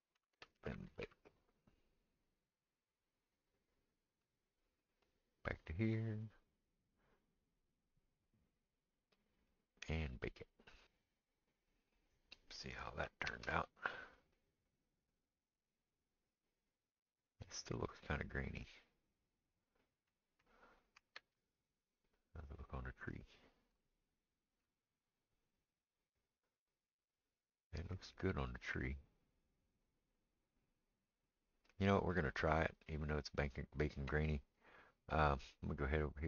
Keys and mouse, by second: 4.4-5.1 middle drag, 5.1 click, 5.2-10.1 middle drag, 10.1-33.0 drag, 13.4 ctrl+space, 21.4 ctrl+space, 33.0-36.2 middle drag.